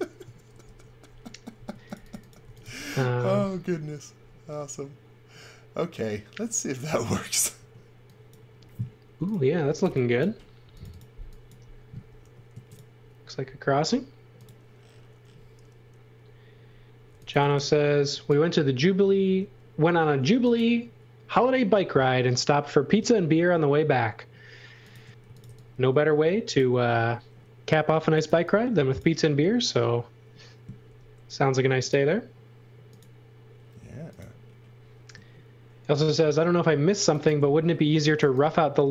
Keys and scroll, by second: 0.5 shift+3, 1.5-3.1 typing, 7.5 space, 9.4-10.4 typing, 12.2 m, 16.8-17.8 typing, 19.2 m, 25.0-25.9 typing, 28.0 x, 28.2 v, 30.9 m, 37.9 x, 38.2 v.